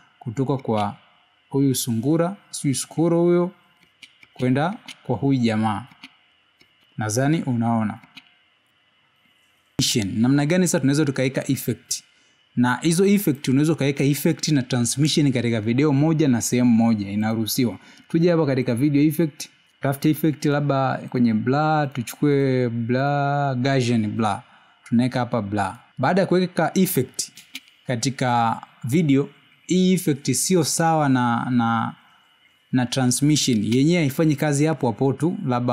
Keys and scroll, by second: 4.3 space, 6.8 space, 9.9 space, 30.8 space.